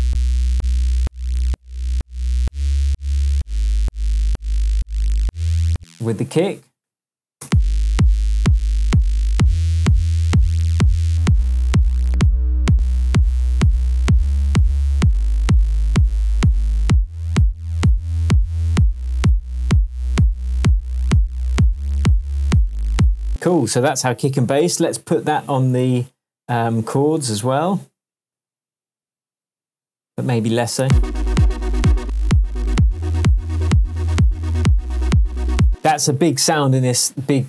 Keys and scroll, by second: 5.7 space, 6.3 super+space, 7.4 super+space, 8.2 space, 23.2 space, 24.7 super+c, 30.8 super+space, 31.7 super+space, 31.9 super+v, 35.6 space.